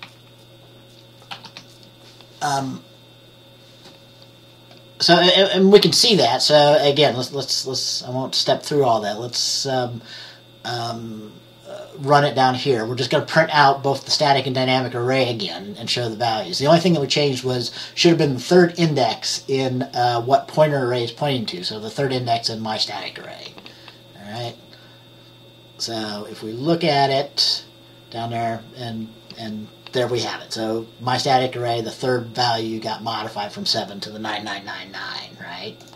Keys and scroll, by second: 1.5 typing, 1.6 ctrl+s.